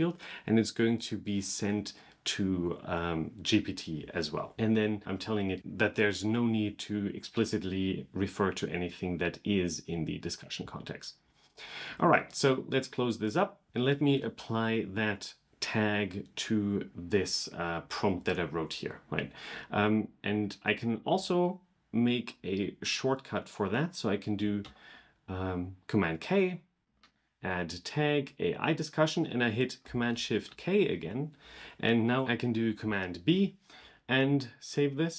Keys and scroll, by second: 24.4 super+k, 30.3 shift+super+k.